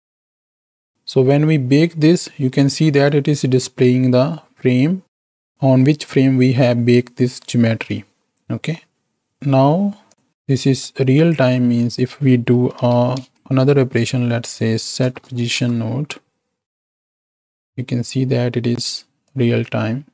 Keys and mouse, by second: 3.1-5.3 drag, 8.7 middle click, 10.1 drag, 10.8 click, 11.6 shift+a, 15.2 Down, 17.7-18.8 shift+drag, 19.2-20.1 shift+drag.